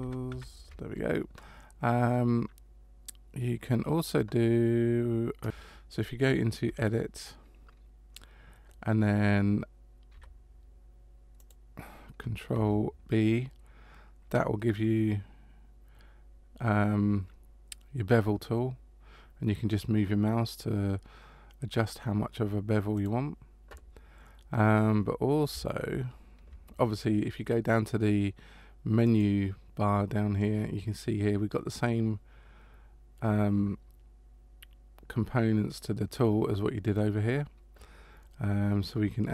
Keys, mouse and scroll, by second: 0.0 ctrl+z, 0.3 ctrl+z, 6.6 Tab, 10.1 b, 12.5 b, 29.1 click.